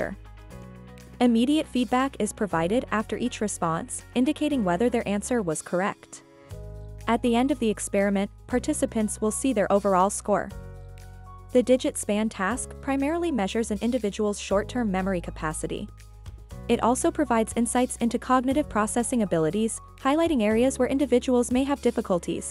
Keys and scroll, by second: 0.5 v, 1.0 j, 11.0-11.7 typing, 15.0-17.2 typing.